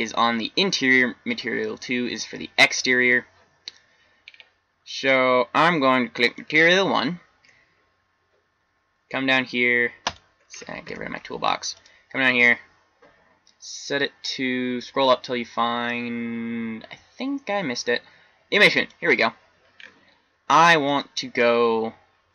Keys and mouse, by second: 1.3-4.4 middle drag, 6.2 click, 10.8 t, 16.9-19.7 middle drag.